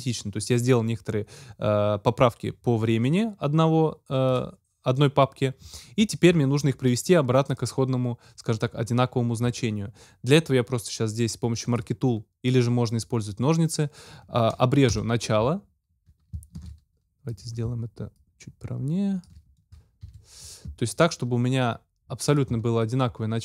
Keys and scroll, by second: 14.9 Delete, 16.6 super+z, 20.0 super+Delete.